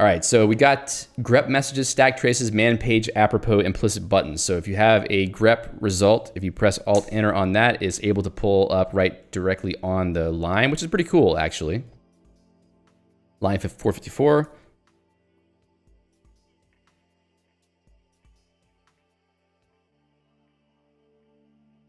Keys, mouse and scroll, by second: 3.1 j, 7.5 alt+Return, 14.7 Escape.